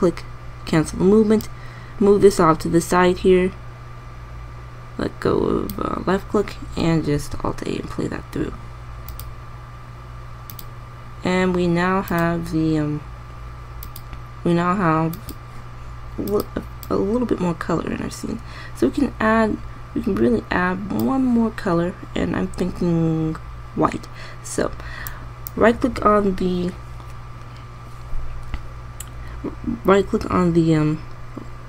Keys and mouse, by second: 7.8 alt+a, 17.9-19.2 drag.